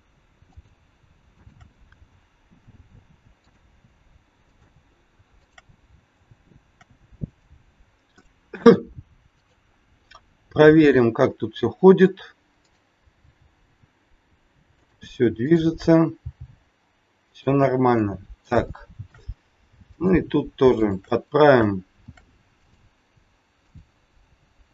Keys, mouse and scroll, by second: 0.5 click, 1.4 shift+click, 2.5 ctrl+shift+c, 4.4 click, 5.4 shift+click, 6.6 ctrl+shift+c, 9.3 click, 10.5 g, 12.6 click, 13.1 g, 15.4 click, 16.1 g, 18.0 middle click, 18.7 shift+middle click, 19.9 click, 20.8 shift+click, 22.0 ctrl+shift+c, 23.6 click.